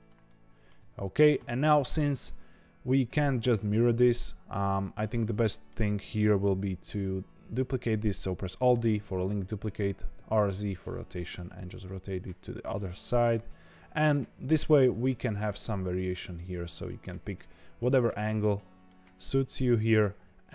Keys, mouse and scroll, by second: 0.2 middle click, 0.8 Tab, 1.7-7.0 middle drag, 7.5-8.7 middle drag, 8.7 alt+d, 12.9-14.1 middle drag, 14.1 r, 18.0 middle click, 18.9-19.2 scroll down 1, 19.2-20.5 middle drag.